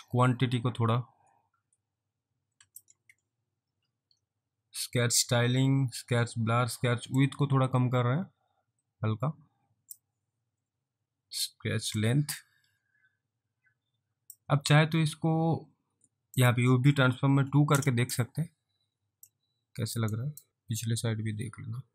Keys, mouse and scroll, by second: 3.1 ctrl+z, 4.1 scroll down 1, 6.2-7.3 scroll down 1, 7.3 click, 10.4 scroll down 1, 11.9 scroll down 1, 12.1 click, 14.9-16.1 scroll up 3, 16.4 click, 17.4 2, 17.7 Return, 19.4 alt+click, 20.2 alt+right click, 20.5 alt+click.